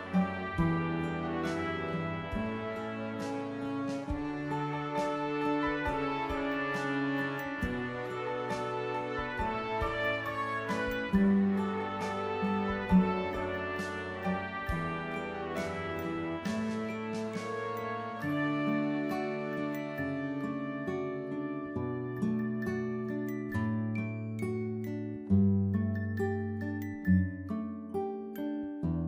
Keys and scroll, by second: 1.0 Down, 1.4-1.8 typing, 5.0 Down, 5.2-7.0 typing, 8.4 typing, 9.6 v.